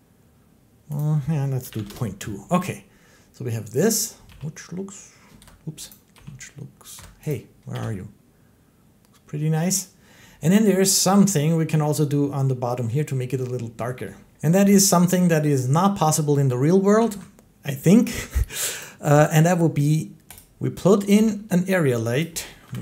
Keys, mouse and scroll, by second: 0.9 click, 1.6 2, 1.7 Return, 4.1 g, 5.2 Escape, 5.7 click, 6.0 g, 6.8 Escape, 7.1 click, 7.6 g, 9.6 click, 11.1 shift+middle click, 14.2 click, 14.2 x, 16.9 a, 18.6 click, 20.2 click, 21.0 g, 22.0 click, 22.5-22.8 typing.